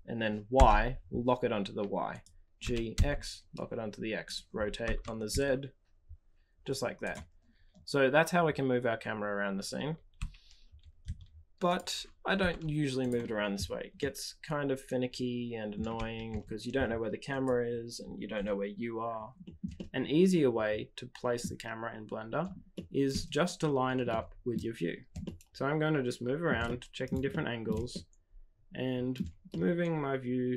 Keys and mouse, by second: 2.5 g, 4.8 r, 10.1 g, 12.2 r, 13.9-15.7 middle drag, 15.9 g, 19.7-21.4 middle drag, 22.7-23.1 shift+middle drag, 24.0-24.5 middle drag, 25.2-26.4 shift+middle drag, 26.6-27.1 middle drag, 27.3-27.6 shift+middle drag, 27.8-29.1 middle drag, 29.4-30.5 shift+middle drag.